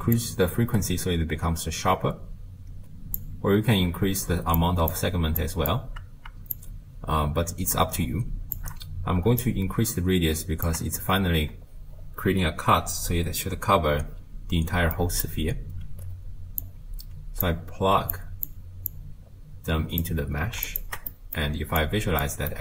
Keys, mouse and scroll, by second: 0.2-3.2 drag, 4.6 click, 5.4 click, 6.5-12.5 shift+drag, 15.0-16.6 middle drag, 16.6 click, 18.1 click, 18.9 drag, 20.7 ctrl+shift+click, 21.1 middle click, 21.9 click, 22.5 middle click.